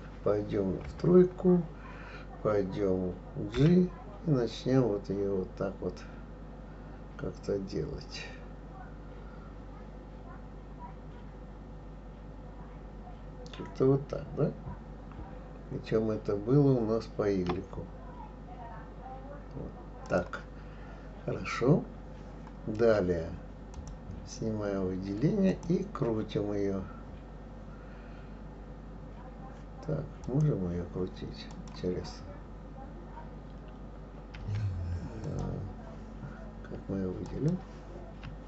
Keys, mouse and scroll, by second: 0.8 KP_3, 3.5 g, 23.7 click, 25.5 click, 30.2 click, 31.5 click, 34.4 r, 35.2 click, 37.2 click, 38.2 r.